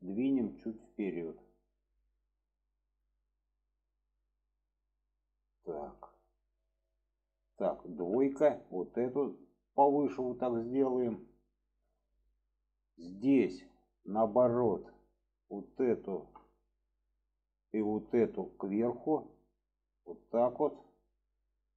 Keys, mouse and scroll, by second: 1.0 click, 3.2-3.6 middle drag, 4.1-5.6 middle drag, 5.9 shift+middle click, 6.6 click, 8.5 click, 9.3 click, 10.3-11.5 middle drag, 11.8-14.0 middle drag, 14.5 middle drag, 15.6 click, 16.5-16.9 middle drag, 17.6 shift+click, 18.1 middle click, 18.9 click, 20.6-21.7 middle drag.